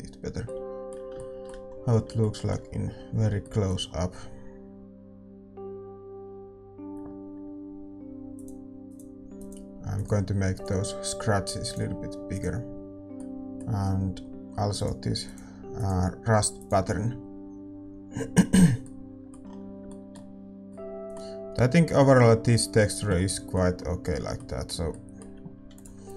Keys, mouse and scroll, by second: 8.4-26.1 drag, 13.8-26.1 middle drag.